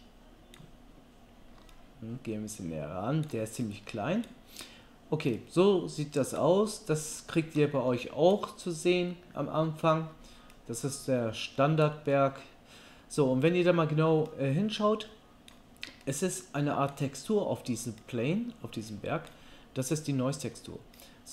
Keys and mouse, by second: 1.7 ctrl+middle click, 10.7-21.3 right drag.